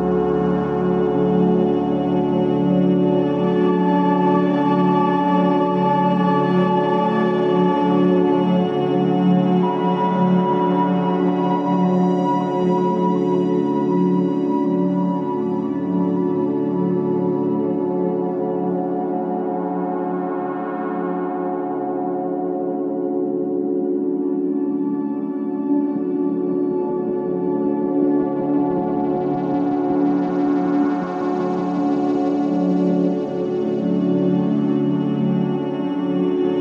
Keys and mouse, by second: 6.0 alt+z, 6.8 g, 10.0 Tab, 10.6 Tab, 11.2-11.7 middle drag, 12.7 alt+z, 13.3-14.1 middle drag, 14.3 g, 18.6-20.0 middle drag, 23.7-24.8 middle drag, 26.7 click, 28.8 click, 29.6 click, 31.7-32.2 middle drag, 32.3 Tab, 33.3 alt+z, 33.7 alt+z, 34.3 Tab, 34.9 middle click.